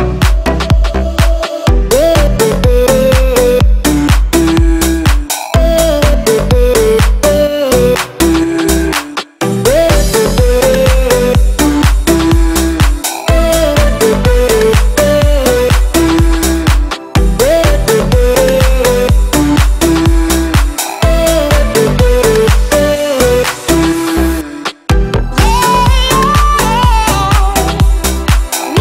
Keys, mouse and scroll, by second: 0.2 space, 0.6 click, 1.4 shift+e, 1.7 space, 2.5 click, 3.7 right click, 4.5 click, 6.0 f, 6.2 click, 8.5-9.6 typing, 9.9 Return, 10.9 space, 11.4 click, 12.2 ctrl+x, 13.4 p, 13.7 click, 14.1 space, 14.5 middle click, 15.0 click, 17.8 right click, 18.8 click, 19.7 scroll up 1, 20.1 middle click, 21.1 shift+x, 21.5 space, 22.3 click, 23.7 l, 24.9 click, 26.7 space, 26.9 click, 27.8 m, 28.2 ctrl+click.